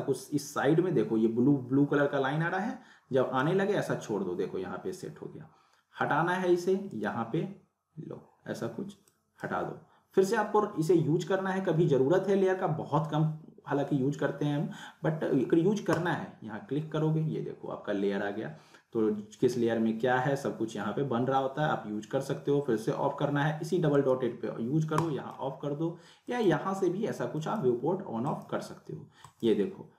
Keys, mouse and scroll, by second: 6.9 right click, 9.2-9.7 drag, 15.9 click, 23.9 right click, 25.0-25.6 drag.